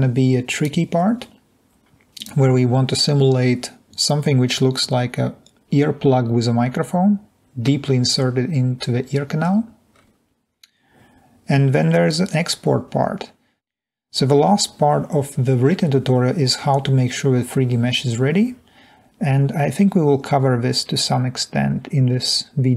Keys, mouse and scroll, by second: 13.8-14.5 scroll down 3.